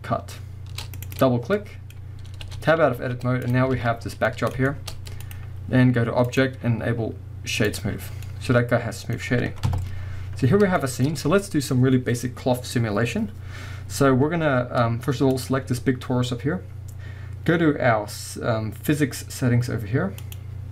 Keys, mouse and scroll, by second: 1.1-1.5 drag, 1.5 scroll down 1, 1.6-5.2 middle drag, 2.4 Tab, 2.8 scroll down 2, 3.0 z, 3.7 alt+a, 4.0 scroll down 2, 4.9 scroll up 2, 5.2 click, 6.3-8.3 drag, 8.0 scroll down 2, 8.3-15.3 middle drag, 9.7 KP_0, 10.4-10.8 scroll up 2, 11.0-15.1 scroll up 2, 15.3 click, 20.2 click.